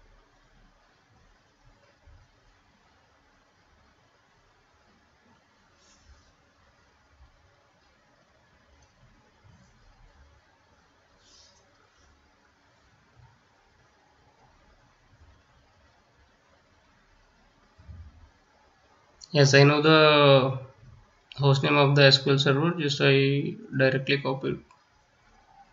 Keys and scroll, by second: 9.3 ctrl+c, 16.0 ctrl+c.